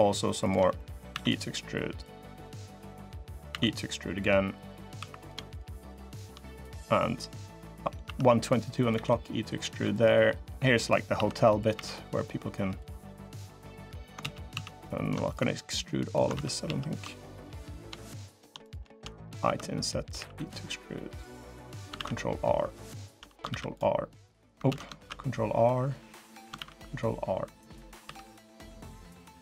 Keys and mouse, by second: 0.2 shift+click, 0.5 click, 0.7 middle click, 0.9 e, 1.8-3.2 drag, 3.2 e, 4.0-5.0 drag, 4.7 3, 7.9 i, 8.7 e, 11.0 i, 11.5 e, 14.0 ctrl+z, 14.3 ctrl+z, 16.1 ctrl+z, 16.4 ctrl+z, 18.4 click, 19.2 i, 19.9 e, 21.7 ctrl+r, 23.2 ctrl+r, 24.4 ctrl+z, 24.8 ctrl+r, 26.3 ctrl+r, 27.8 3.